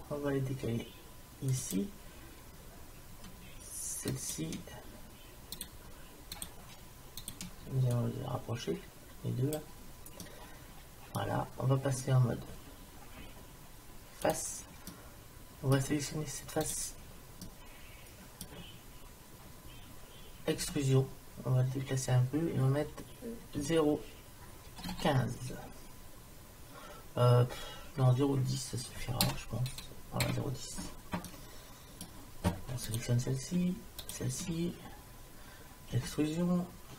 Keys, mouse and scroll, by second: 4.1 right click, 8.0-9.7 drag, 10.2-12.0 middle drag, 14.3 click, 14.9-16.3 middle drag, 16.8 right click, 17.5 middle click, 20.6 e, 31.3-32.9 middle drag, 32.9-36.0 drag, 36.0 e.